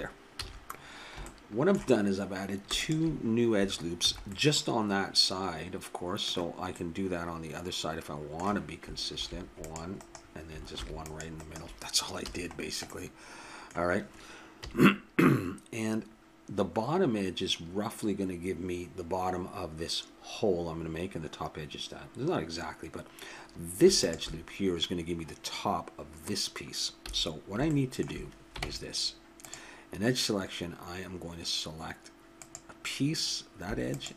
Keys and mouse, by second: 0.3 a, 0.8 middle click, 0.9 middle click, 2.8 right click, 4.1 a, 4.5 middle click, 9.1 ctrl+r, 10.7 ctrl+r, 12.3 a, 14.6 KP_3, 24.0-26.2 drag, 27.1 a, 28.0 click, 28.6 ctrl+Tab, 32.4-34.1 drag.